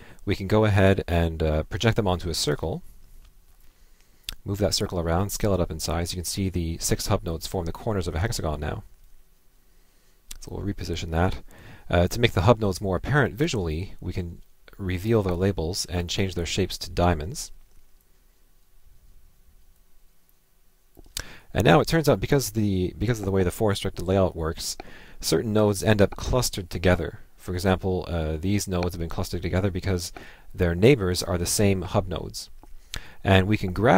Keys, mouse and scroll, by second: 2.5 ctrl+Left, 5.2 ctrl+click, 18.1-19.8 ctrl+drag, 20.3 ctrl+click, 33.7 Left.